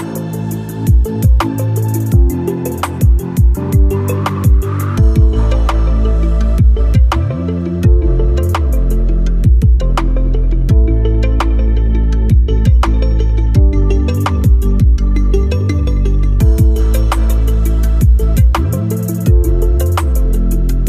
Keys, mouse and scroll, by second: 1.2 click, 3.1 w, 4.4-6.1 drag, 6.1 alt+scroll up 1, 6.8 alt+middle click, 7.0 alt+scroll up 1, 7.8 alt+scroll down 1, 8.3-9.6 alt+scroll up 2, 9.7 alt+click, 10.8 alt+scroll up 1, 11.1 alt+middle click, 11.9-19.9 drag, 19.9-20.3 alt+scroll up 1.